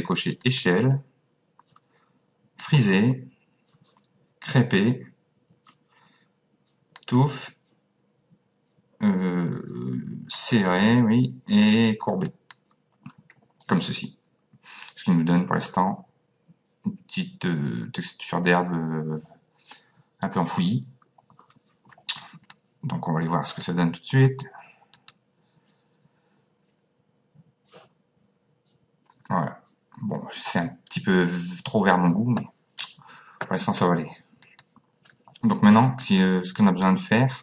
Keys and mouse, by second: 0.4 click, 2.6 click, 4.5 click, 7.0 click, 10.4 click, 12.3 click, 22.2 click, 23.5 click, 25.0 click, 34.4 click, 36.0 click.